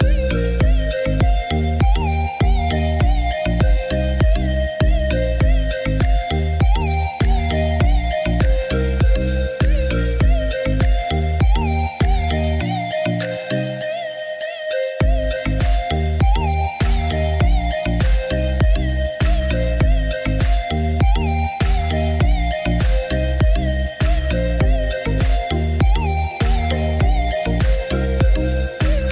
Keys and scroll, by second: 8.7 2, 9.3 Return, 19.8 2, 20.3 Return.